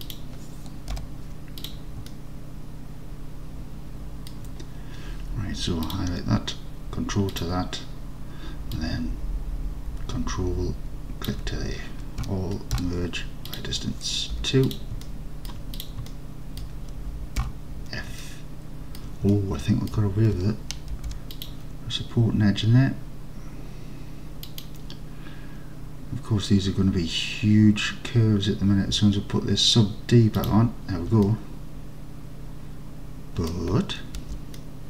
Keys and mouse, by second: 0.1 click, 1.0 1, 2.2-4.4 alt+drag, 7.4 ctrl+click, 8.9-11.3 drag, 12.3 a, 12.8 m, 14.4 2, 14.7 click, 15.1 alt+click, 16.2 alt+click, 17.5 f, 18.3 alt+click, 19.4-20.0 alt+drag, 21.0 ctrl+r, 24.5 click, 30.5 click, 31.4-33.6 alt+drag, 34.2 alt+z, 34.8 alt+click.